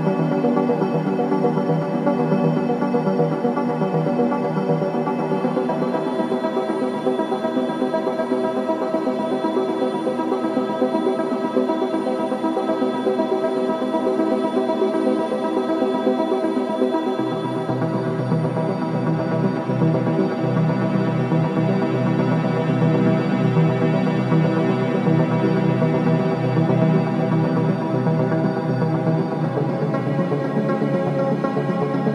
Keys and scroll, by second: 12.3 ctrl+space, 13.6 g, 14.2 KP_0, 14.2 v, 14.3 v, 20.1 ctrl+KP_0, 24.2 v.